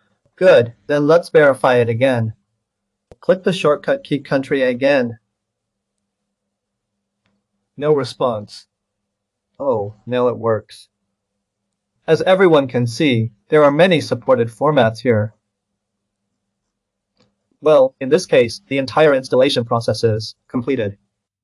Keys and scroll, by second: 4.5 ctrl+l.